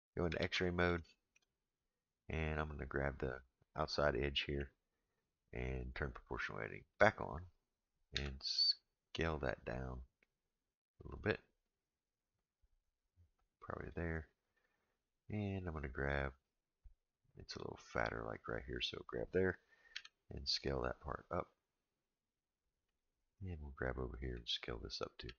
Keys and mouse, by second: 0.4 alt+z, 1.0 shift+middle click, 2.4 click, 6.9 click, 8.1 s, 18.3 click, 19.9 s, 23.8 click, 25.2 s.